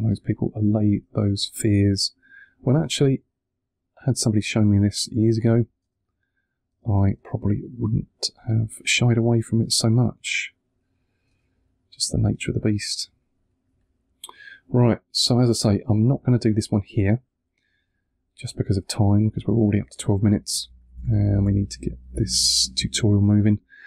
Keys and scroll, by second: 5.7 space, 9.1 space, 11.1 space, 13.6 2, 20.0 2, 20.6 1, 20.8 2, 21.4 1.